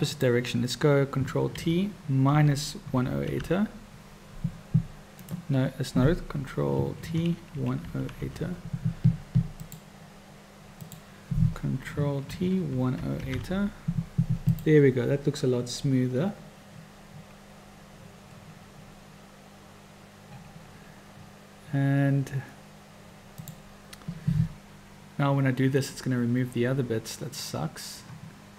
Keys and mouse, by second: 0.1-1.0 drag, 1.5 ctrl+t, 7.0 ctrl+t, 10.7 click, 12.3 ctrl+t.